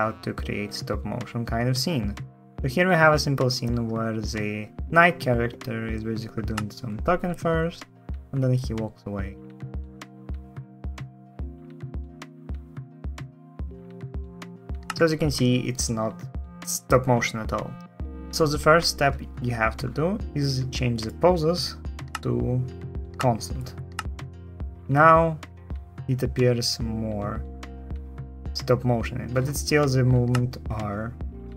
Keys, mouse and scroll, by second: 6.3 space, 14.6 space, 23.7 space, 30.1 space.